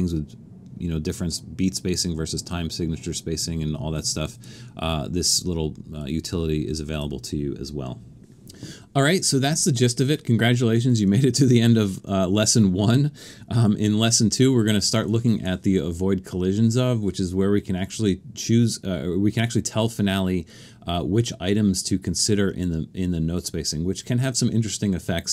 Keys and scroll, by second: 13.7 alt+super+a.